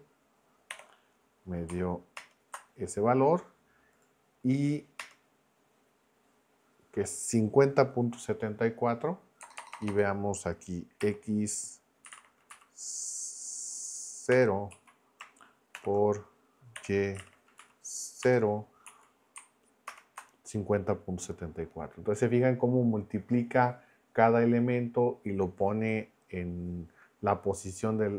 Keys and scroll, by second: 0.7 y, 2.1 ctrl+Return, 5.0 Return, 9.4 BackSpace, 10.0 BackSpace, 11.0 x, 12.0 [, 12.1 ], 12.5 Left, 14.3 0, 14.7 Right, 15.7 shift+8, 16.8 y, 17.1 [, 17.6 Left, 18.2 0, 18.8 Right, 19.9 ctrl+Return.